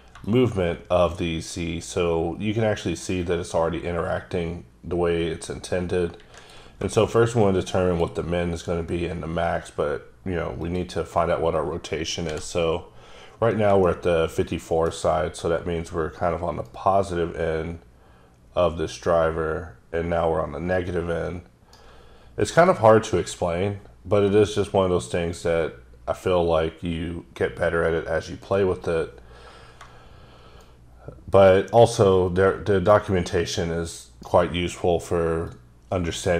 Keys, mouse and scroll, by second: 0.3 click, 7.2 click, 9.8-10.6 scroll down 1, 10.6 click, 12.3 n, 13.9 shift+middle click, 16.7 right click, 22.6 click, 23.7-24.2 scroll down 3, 24.6 click, 30.6 right click, 35.5 shift+click.